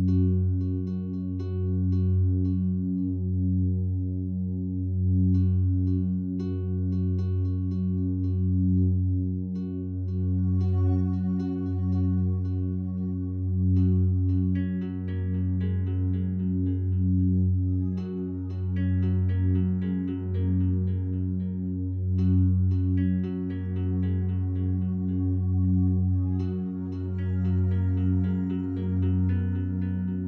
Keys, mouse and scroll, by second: 3.9 right click, 5.1-10.3 drag, 10.3-15.5 alt+drag, 15.5 a, 15.7 a, 26.3 right click, 26.7 Tab, 27.5 right click, 28.5 2, 29.3 right click.